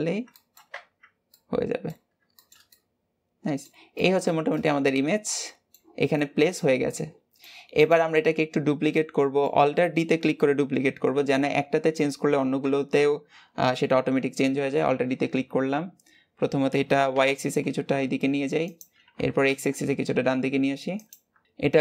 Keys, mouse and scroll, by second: 0.2 shift+middle click, 0.6 Tab, 0.9 scroll down 2, 1.1 middle click, 1.9 scroll down 2, 2.2-3.7 shift+middle drag, 3.7 scroll up 1, 3.9-7.8 middle drag, 7.8 click, 8.5-8.8 scroll down 2, 8.8-12.5 middle drag, 12.5 KP_7, 14.4 alt+d.